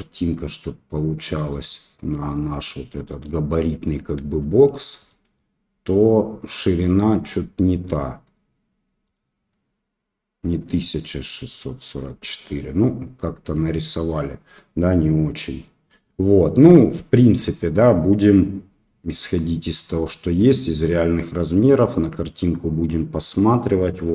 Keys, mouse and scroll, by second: 2.3-3.9 drag, 4.1 s, 5.3-7.9 drag, 9.0 click, 18.3-24.1 drag.